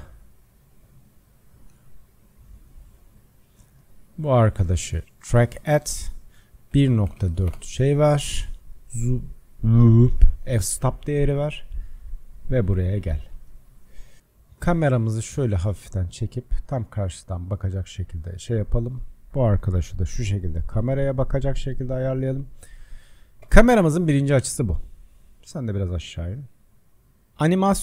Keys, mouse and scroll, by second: 1.3-5.9 drag, 6.1-10.8 drag, 10.8-11.1 scroll up 4, 11.2 scroll down 1, 12.0-15.1 middle drag, 15.1 click, 18.6 click, 19.7 r, 22.7-23.4 drag, 23.4 KP_0, 25.1 click, 26.2 click, 27.1 KP_0.